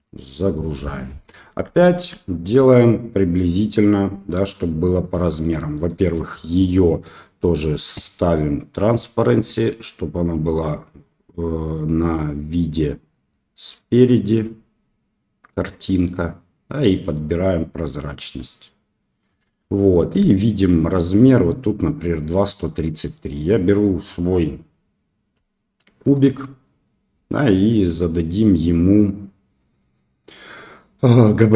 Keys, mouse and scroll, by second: 1.8-2.1 shift+middle drag, 5.7 click, 7.4 click, 8.9 click, 10.3 click, 13.3-19.3 drag, 20.3-20.7 shift+middle drag, 23.0 click.